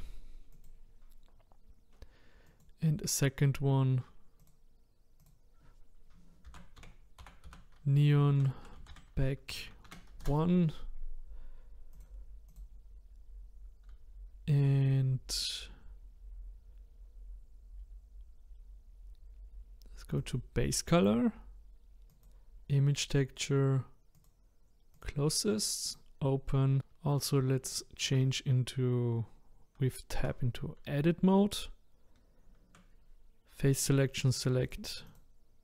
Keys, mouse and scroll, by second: 2.4-8.3 drag, 11.9 click, 12.5 click, 22.3-23.3 drag, 24.1-26.8 drag, 27.1-27.7 scroll up 2, 27.7-30.2 shift+middle drag, 30.2 Tab, 34.3 click, 34.6 click, 35.1 click.